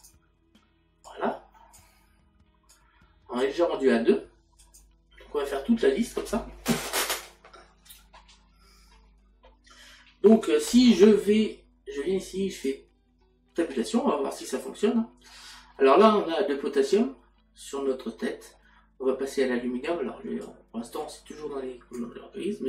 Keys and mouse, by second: 0.0 click, 1.1 click, 2.7 click, 13.0 click, 15.3 middle click.